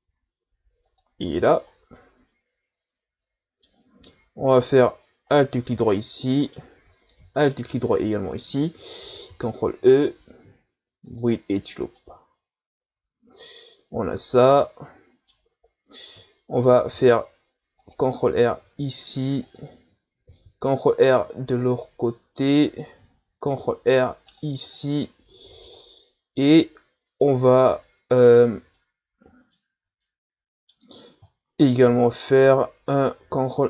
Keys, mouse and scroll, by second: 1.7 scroll down 2, 1.9-5.3 middle drag, 5.3 alt+right click, 6.2-7.4 middle drag, 7.4 alt+shift+right click, 9.3 ctrl+e, 12.0-15.7 middle drag, 15.7-16.6 scroll up 1, 16.9 ctrl+r, 20.3 ctrl+r, 23.4 ctrl+r, 25.5 Tab, 25.8-29.7 middle drag, 29.7 Tab, 30.0-31.9 middle drag, 31.9 KP_1.